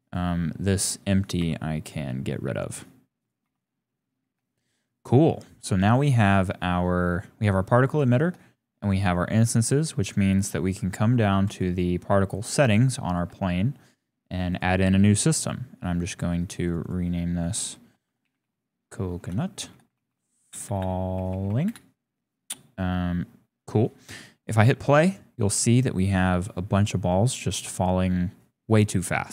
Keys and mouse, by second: 1.4 x, 3.4 x, 4.5 shift+click, 7.1 drag, 8.4 shift+click, 11.4 click, 13.5 shift+click, 14.5 click, 16.9-21.7 drag, 20.1 m, 20.6 BackSpace, 20.8 BackSpace, 21.3 l, 25.1 click, 28.9-29.3 drag.